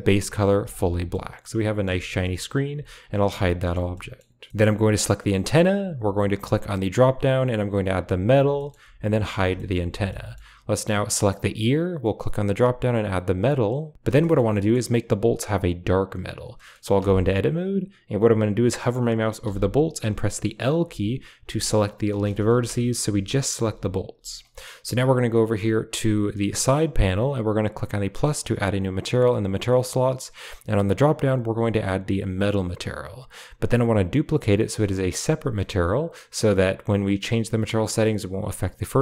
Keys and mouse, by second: 1.0-1.7 middle drag, 1.9 shift+middle click, 2.1-2.4 middle drag, 3.1 h, 3.5 shift+middle click, 3.8 middle click, 5.0 click, 6.3-8.2 drag, 8.5 shift+middle drag, 9.1 h, 9.4 shift+middle drag, 10.0-10.3 middle drag, 10.5 click, 11.9-13.2 drag, 14.5 middle drag, 16.4 middle click, 16.9 Tab, 19.5 l, 19.9 l, 20.7 l, 21.3 l, 22.4 ctrl+z, 22.9 l, 23.5 l, 24.0 l, 25.5 click, 28.7 click, 30.5-32.4 drag.